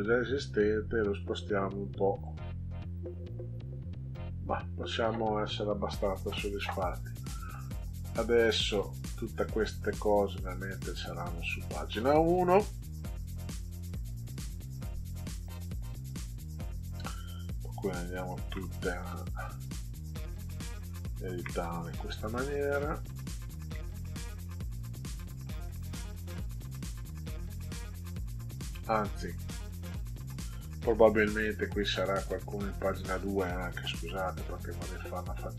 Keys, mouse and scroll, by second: 2.1 click, 10.4 click, 13.5 Tab, 13.8 1, 15.8 click, 18.2 Tab, 18.5 1, 19.9 click, 21.4 Caps_Lock, 21.9 1, 23.0 click, 23.7 Caps_Lock, 24.2 1, 26.6 click, 32.5 Tab, 34.0 2.